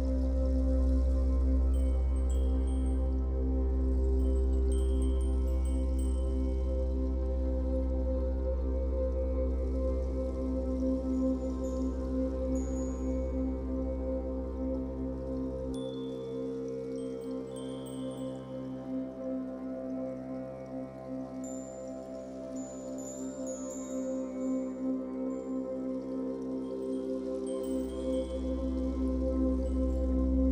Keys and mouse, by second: 0.7 shift+click, 0.7 typing, 3.4-4.2 typing, 3.9 click, 5.8-7.0 drag, 7.0-8.1 typing, 7.6 Return, 8.8-11.6 drag, 10.5 space, 11.6 space, 12.2-13.8 drag, 12.6-14.7 typing, 14.3-15.8 drag, 16.5 space, 17.4 ctrl+alt+click, 18.5 ctrl+s, 19.1-23.2 alt+shift+drag, 23.2 click, 24.7 Delete, 25.3 click, 25.6 Delete, 26.0-27.0 drag, 26.7 Delete, 27.6 space.